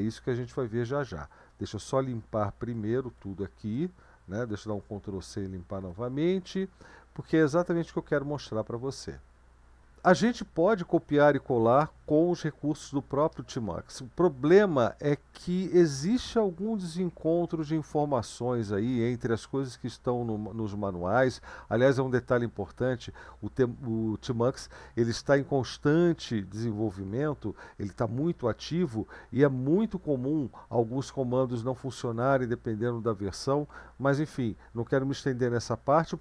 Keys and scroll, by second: 2.9 ctrl+l, 4.7 ctrl+c, 5.8 ctrl+l.